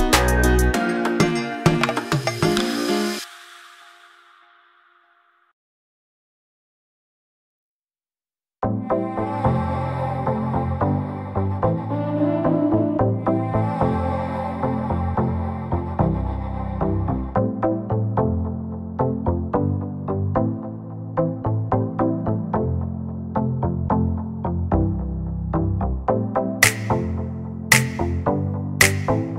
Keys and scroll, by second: 22.1 space, 22.3 Escape.